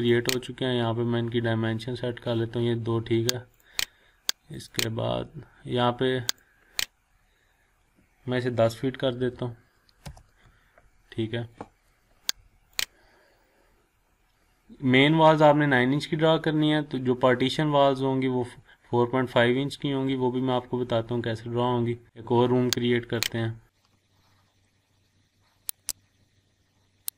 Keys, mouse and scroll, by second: 1.2 scroll down 1, 3.5 click, 8.8-9.7 typing, 10.0 Return, 12.7 click, 13.3 scroll down 1, 14.3-14.7 scroll up 1, 16.7 scroll up 1, 17.5-18.1 scroll down 1, 20.8-22.0 scroll up 1, 23.2 click, 25.7 click.